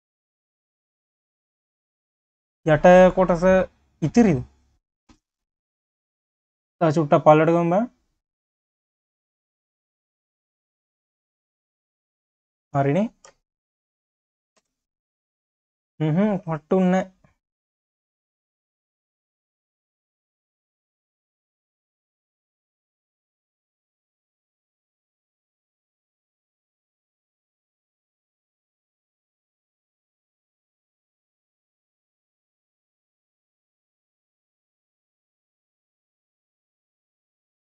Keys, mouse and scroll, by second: 0.0-0.9 scroll up 5, 1.0 click, 1.3 scroll down 4, 1.5 q, 3.5 click, 4.0 scroll up 4, 4.3 q, 5.3 Tab, 5.7 q, 6.4-7.8 drag, 8.8 scroll down 3, 9.0 q, 10.4-11.4 drag, 11.4 q, 11.8 Tab, 12.0-12.3 scroll down 4, 12.5 q, 13.1-13.6 scroll up 1, 13.6 shift+click, 14.6 ctrl+KP_Add, 15.1 q, 16.7-18.1 drag, 18.1-19.0 scroll down 1, 19.4 click, 21.0 click, 22.4 click, 23.2 q, 24.7-25.0 scroll up 2, 25.0 q, 26.5 scroll up 2, 26.7 q, 30.6 click, 32.2 click, 32.8-33.4 scroll down 6, 33.4 q, 34.1 drag, 34.6 ctrl+s, 35.2 ctrl+z, 35.4 ctrl+z, 35.7 ctrl+z, 36.1 ctrl+z, 36.7 ctrl+z, 37.4 ctrl+z.